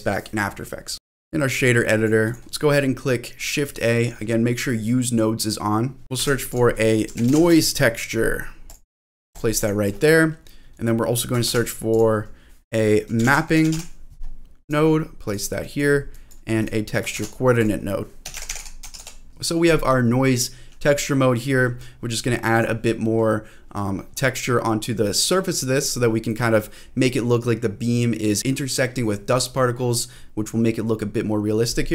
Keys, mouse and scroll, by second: 0.9 scroll down 1, 1.1 middle click, 1.8 click, 2.3 click, 6.1 shift+a, 9.6 click, 11.4 shift+a, 15.6 click, 16.1 click, 16.6 click, 17.1 shift+a, 18.4 o, 19.3 middle click, 19.3-19.8 scroll up 5, 21.9-22.5 scroll up 3, 22.5 click, 24.1-25.2 scroll down 1, 25.2-25.6 scroll down 1.